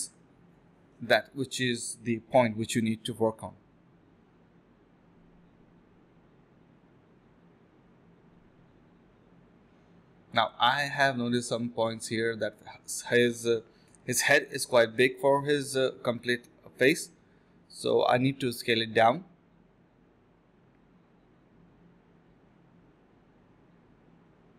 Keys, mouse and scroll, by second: 0.3 alt+click, 1.0-1.3 typing, 2.3-3.5 typing, 5.3 alt+click, 7.3 d, 7.7 alt+click, 7.9 alt+click, 8.5 alt+click, 8.6 alt+double click, 8.8 alt+double click, 9.3-9.7 typing, 11.1 alt+click, 11.5 alt+click, 12.0 alt+click, 12.1 alt+click, 15.9 alt+click, 17.1 typing, 17.8 shift+click, 18.5 alt+click, 20.7 alt+click, 20.9 alt+click, 21.0 alt+click, 22.5 typing, 23.1 alt+click, 23.9 ctrl+z.